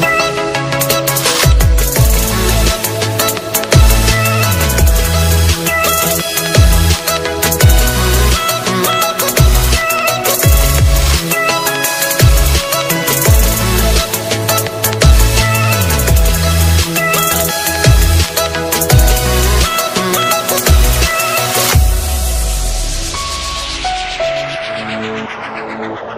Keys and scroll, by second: 8.1 ctrl+alt+z, 14.1 ctrl+alt+z.